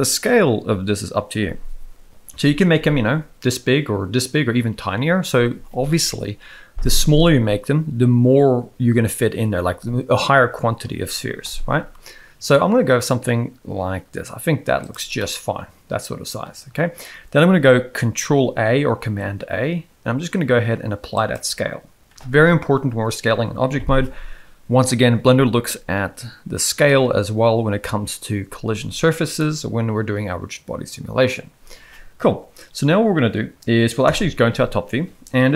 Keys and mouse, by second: 2.4 s, 15.2-16.8 middle drag, 18.6 ctrl+a, 29.3-31.2 middle drag, 34.0 KP_7.